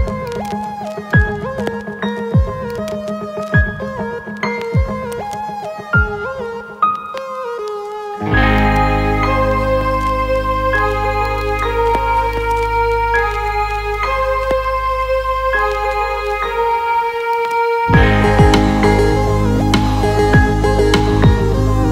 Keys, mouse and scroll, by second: 0.3-1.7 alt+middle drag, 2.8 click, 3.8 g, 5.2 right click, 8.7 alt+middle click, 11.4 click, 12.3-15.5 alt+middle drag, 17.3-18.3 alt+middle drag, 19.0 ctrl+b.